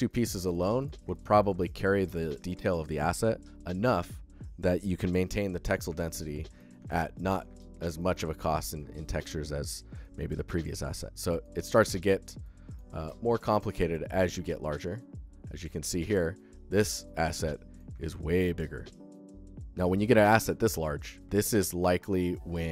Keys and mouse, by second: 1.0 alt+click, 1.2 ctrl+alt+click, 1.4 alt+shift+click, 1.7 alt+shift+click, 2.3 shift+click, 5.9 alt+shift+click, 7.4 alt+shift+click, 7.8 alt+shift+click, 9.8 alt+shift+click, 10.6 shift+click, 12.3 alt+shift+click, 12.9-14.8 ctrl+alt+drag, 14.8 ctrl+alt+middle click, 15.8-17.6 alt+shift+middle drag, 20.5 click, 21.3-21.6 alt+shift+middle drag, 21.7-22.0 alt+middle drag, 22.1-22.7 alt+shift+middle drag.